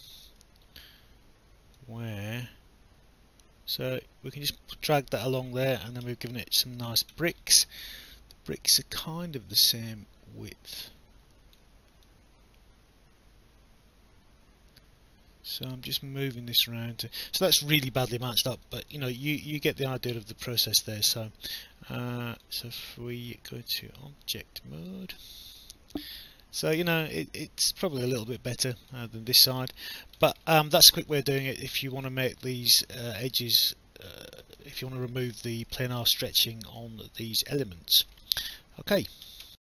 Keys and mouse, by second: 1.8 click, 8.1 alt+click, 9.8 click, 12.1 click, 18.9 alt+click, 21.0 click, 21.1 alt+click, 22.4 click, 23.8 right click, 25.1 click, 25.6 alt+click, 29.7 alt+click, 30.7 alt+click, 31.7 alt+click, 32.3 alt+middle click, 33.5 alt+click, 34.9 alt+middle click, 35.3 alt+click, 36.8 alt+click, 39.4 alt+F9.